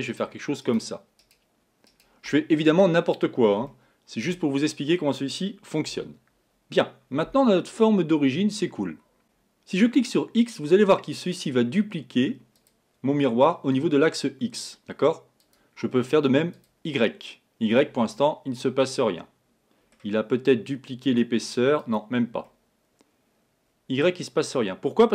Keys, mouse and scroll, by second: 0.1 right click, 0.6 right click, 1.2 right click, 1.9 right click, 3.7-5.9 middle drag, 5.9 Tab, 9.2 click, 12.6 click, 15.4 click, 16.6 click, 18.2-21.0 middle drag, 21.0 click, 21.8 click, 22.5-25.1 middle drag.